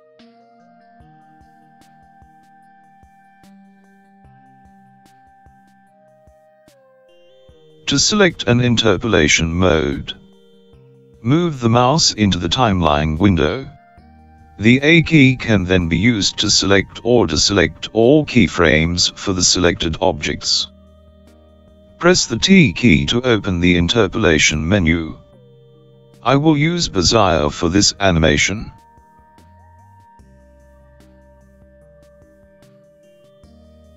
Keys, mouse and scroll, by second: 2.5 click, 13.4 a, 14.3 a, 14.5 a, 16.4 a, 16.6 a, 17.3 a, 21.9 t.